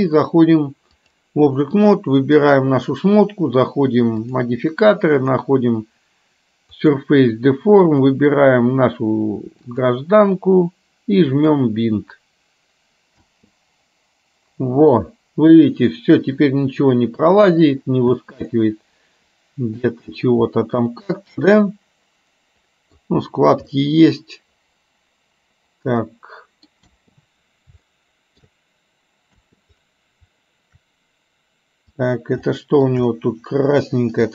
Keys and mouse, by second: 2.4 click, 5.3-7.1 drag, 7.9 click, 11.6 click, 13.3 space, 18.3 space, 18.6-19.8 middle drag, 20.6-23.1 middle drag, 23.8-26.7 middle drag, 26.9 space, 27.9 shift+middle click, 29.6 space, 32.6 shift+middle click.